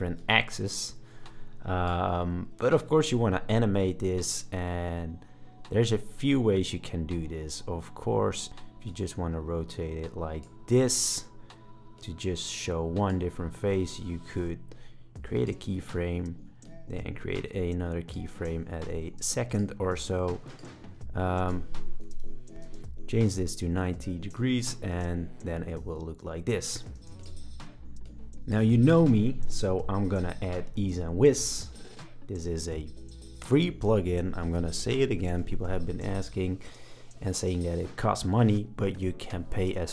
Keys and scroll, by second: 2.5 super+z, 8.4 super+z, 11.0 super+z, 13.6 super+z, 21.8-22.7 typing, 24.9 space, 27.0 space.